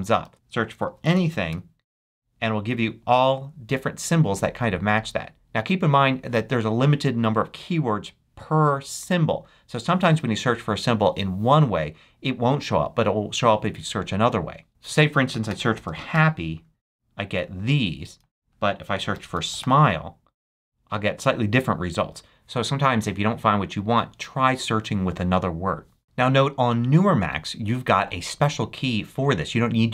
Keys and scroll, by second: 0.2 super+a, 0.6-2.0 typing, 15.2-16.6 typing, 18.2 super+a, 18.9-20.1 typing, 26.0 super+BackSpace.